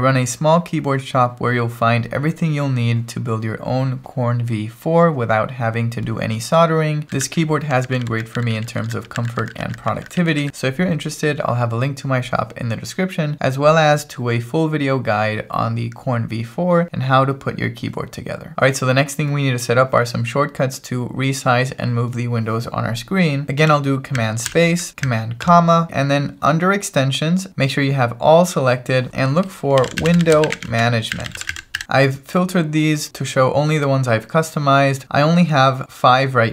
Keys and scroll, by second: 24.5 super+space, 25.4 super+,, 29.5-32.3 typing.